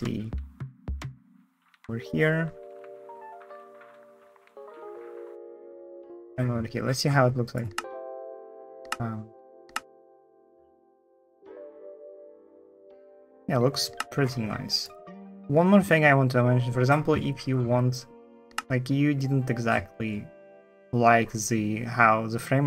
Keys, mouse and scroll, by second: 0.2 Right, 1.2 Left, 1.4 Left, 3.1 Right, 3.5 Right, 3.8 Right, 4.4 Right, 4.4 Right, 4.4 Right, 4.9 Left, 5.0 Right, 5.1 Right, 5.6 Right, 5.8 Right, 5.9 Left, 5.9 Left, 7.5 space, 8.6 space, 9.0 F3, 9.2 1, 9.5 space, 13.7 space, 18.3 space.